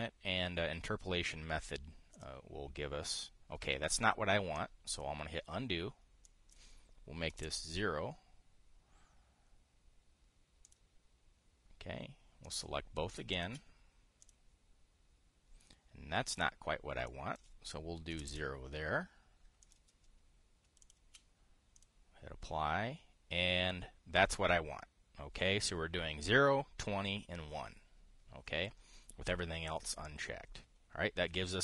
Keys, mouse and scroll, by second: 2.8 click, 5.6 click, 7.0 click, 8.0 KP_0, 8.2 Return, 11.3 click, 13.1 click, 14.0 shift+click, 14.9 click, 17.0 click, 17.8 click, 18.8 KP_0, 20.3 click, 21.6 shift+click, 22.5 click.